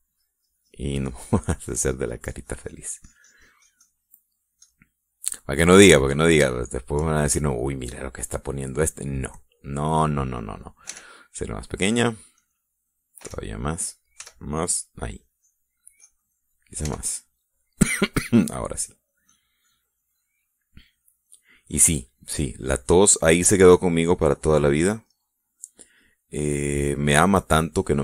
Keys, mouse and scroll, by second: 0.7 f, 1.0 click, 1.3-5.3 drag, 5.8 click, 6.9 click, 7.8 shift+middle click, 8.3-9.6 shift+middle drag, 9.9-11.6 middle drag, 12.1 f, 13.6 click, 14.5 f, 14.7 click, 15.4 f, 15.6 click, 16.4-17.7 drag, 18.0 f, 18.5 click, 19.6 click, 20.0 click, 20.8 click, 22.0 click, 22.4 click, 22.9 click, 23.8 click, 24.8 click, 25.7 click, 26.3 middle click, 27.7 click.